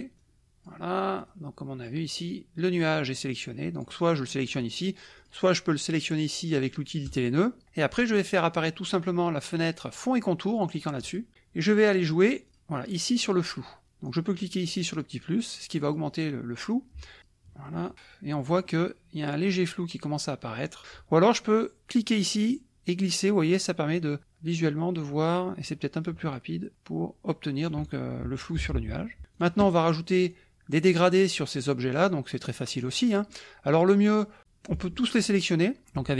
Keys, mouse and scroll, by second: 0.3 click, 1.3 click, 2.8 click, 3.7 click, 4.5 click, 5.2 click, 7.1 click, 11.0 click, 12.5 click, 14.1 click, 14.6 click, 15.9 click, 17.2 click, 17.8-19.1 middle drag, 17.8-19.1 scroll up 1, 20.7 click, 22.4-28.1 drag, 28.6 KP_Subtract, 29.2 middle click, 29.3 click, 30.2 click, 30.9 click, 31.5 click, 32.0 click, 32.5 click, 34.7 click.